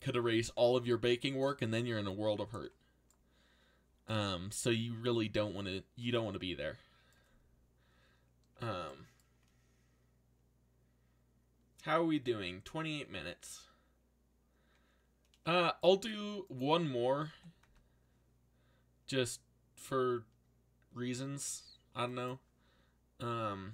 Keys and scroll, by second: 17.3 g, 17.6 x.